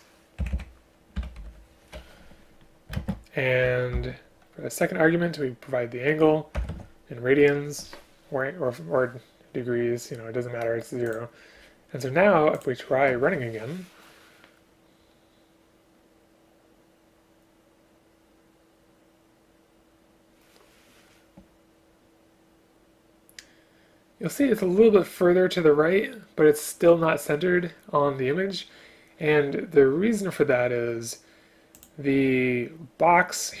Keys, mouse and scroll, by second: 0.4 Delete, 0.5 Delete, 1.2 End, 1.4 Left, 3.0 space, 4.0 ctrl+p.